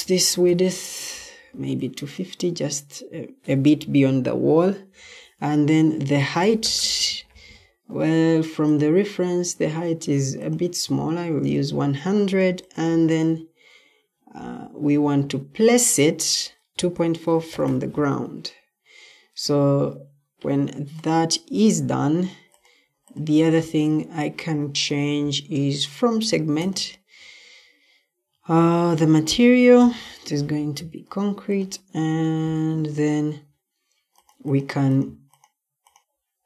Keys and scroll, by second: 0.0-0.9 typing, 6.2-6.9 typing, 16.5-18.0 typing, 29.7 c, 30.2 c.